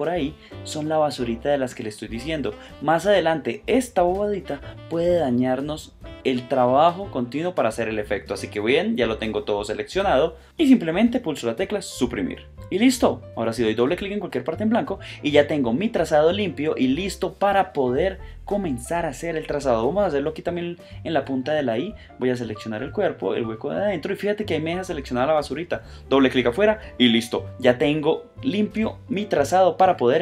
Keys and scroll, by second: 0.0 shift+space, 18.9 super+a.